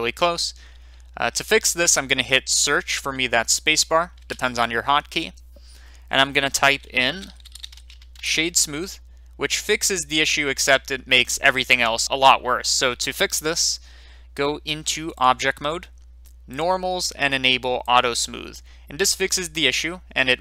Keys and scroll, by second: 7.2-7.6 typing, 8.1 Return.